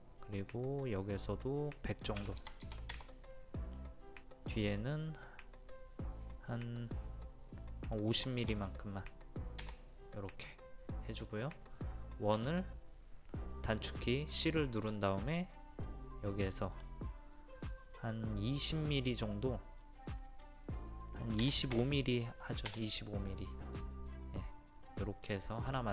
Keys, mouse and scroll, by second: 0.9 click, 2.2 KP_1, 2.4 KP_0, 4.5 click, 8.1 KP_5, 8.4 KP_0, 10.5 middle click, 11.4-11.8 scroll up 1, 12.4 typing, 14.2-15.3 drag, 21.4 KP_2, 21.8 KP_5, 23.8 middle click, 25.6-25.9 scroll up 1.